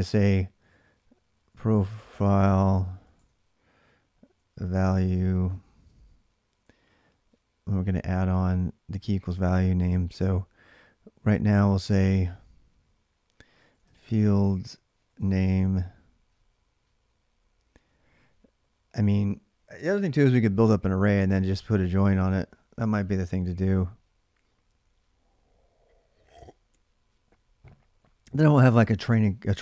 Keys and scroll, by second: 0.4-5.3 typing, 6.4 typing, 7.6 typing, 13.1-15.7 typing, 28.7-29.6 typing.